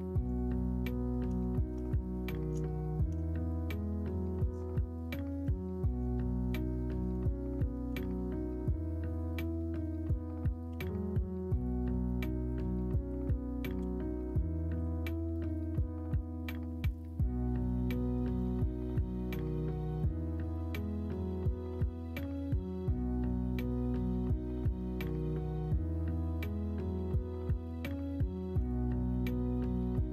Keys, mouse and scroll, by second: 1.5 shift+middle drag, 2.0 middle drag, 2.7 shift+middle drag, 4.0 middle click, 4.3 ctrl+s, 5.8 middle click, 6.1 shift+middle drag, 13.8 ctrl+KP_Add, 15.4 middle click, 16.0 middle drag, 17.0-18.5 middle drag, 19.1-22.2 middle drag, 22.7-26.9 middle drag, 28.2 middle click, 28.5 Tab, 28.8 middle click, 29.3 alt+z, 29.9 alt+middle click.